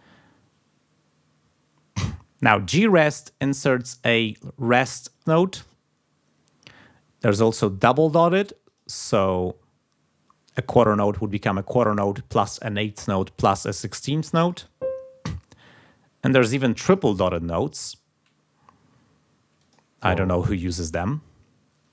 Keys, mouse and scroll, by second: 2.8 click, 3.4 click, 3.7 click, 8.6 click, 14.4 click, 16.8 click, 19.6 click.